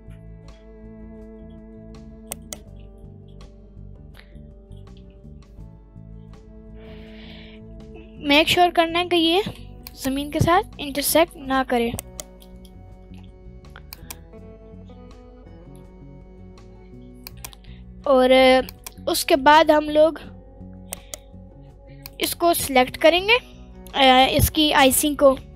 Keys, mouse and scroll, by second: 2.3 ctrl+right click, 2.7-3.1 scroll up 2, 3.0-3.5 middle drag, 3.8-4.2 scroll up 1, 4.3-4.7 middle drag, 5.0 g, 5.1 z, 9.4 Down, 9.8 click, 10.1-10.5 middle drag, 10.5 scroll down 1, 11.6 scroll down 1, 11.6 g, 11.7 z, 12.0 right click, 12.3 middle click, 12.5-13.1 scroll down 3, 13.9 click, 14.5-15.2 scroll down 2, 14.7-15.2 scroll up 1, 16.5-17.1 scroll up 2, 17.2 click, 17.6 g, 17.7 z, 18.7 click, 19.2-19.5 middle drag, 19.7 scroll down 1, 19.8-20.1 middle drag, 20.9-21.6 right drag, 21.6 scroll up 1, 22.0 click, 22.5 scroll up 1, 22.7 middle click, 23.0-25.1 scroll up 1.